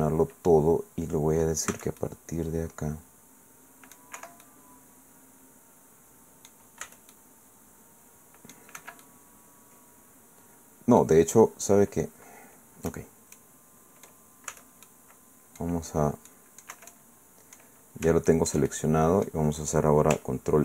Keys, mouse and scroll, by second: 1.7 c, 2.0-3.1 middle drag, 3.1-4.1 drag, 4.2 Escape, 4.4-6.7 drag, 6.8 c, 7.1-8.7 drag, 8.8 Escape, 9.0-11.2 drag, 13.3 click, 14.5 c, 15.1 click, 15.3 middle click, 16.5 click, 16.7 Escape, 16.9 click, 17.7-18.5 scroll down 1, 18.0 Caps_Lock, 18.5 click.